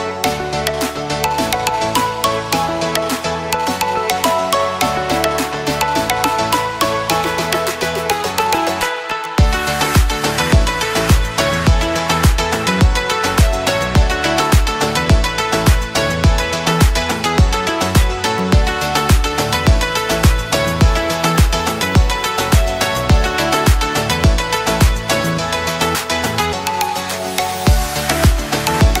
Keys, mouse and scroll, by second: 4.4-8.5 drag, 10.7 alt+scroll up 1, 11.1 space, 11.2-12.7 click, 13.1 alt+scroll down 1, 13.9 ctrl+z, 14.3-15.0 click, 14.8 space, 15.4-16.1 drag, 18.0 ctrl+z, 19.6-22.7 drag.